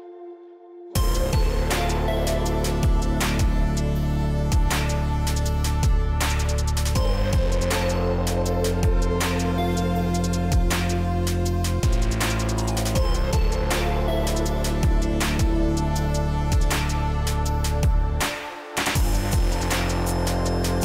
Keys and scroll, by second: 2.6 Up, 14.8 Up, 18.4 Down.